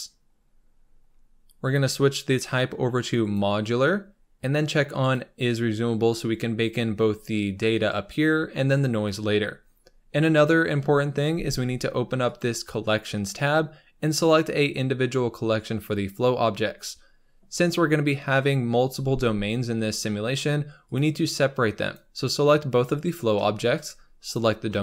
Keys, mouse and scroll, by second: 3.3-5.1 drag, 16.7-20.3 scroll down 2, 20.3 scroll up 4, 20.9 click, 21.9 shift+click, 24.3 shift+click.